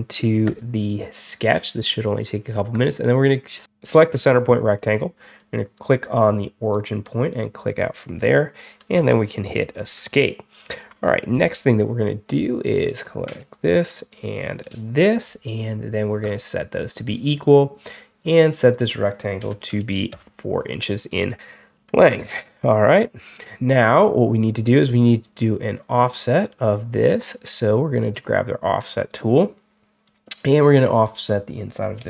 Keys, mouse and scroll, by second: 0.3 click, 2.6 click, 5.2 click, 6.6 click, 8.8 Escape, 12.6 click, 14.2 shift+click, 16.1 click, 17.3 click, 18.1 click, 18.6 click, 22.0 Escape, 27.9 click, 28.9 click, 29.9-30.8 drag.